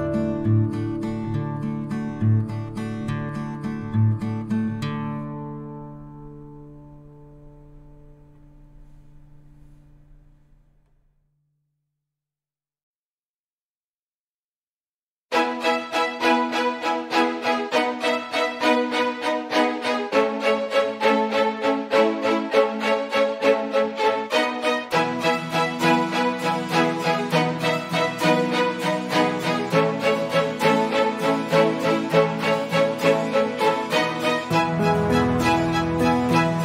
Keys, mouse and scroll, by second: 3.3 click, 3.9 ctrl+c, 4.3 click, 5.3 ctrl+alt+v, 6.9 click, 7.5 ctrl+c, 9.3 ctrl+alt+c, 9.7 click, 10.2 ctrl+alt+v, 12.1 click, 14.3 ctrl+z, 15.1 ctrl+z, 15.5 click, 17.5 Delete, 18.5 click, 21.3 ctrl+e, 22.3 click, 25.0 ctrl+e, 26.1 click, 28.3 ctrl+e, 29.5 click, 30.1 ctrl+e, 32.0 click, 32.9 ctrl+c, 33.5 click, 35.7 click, 36.3 ctrl+alt+c, 36.5 click.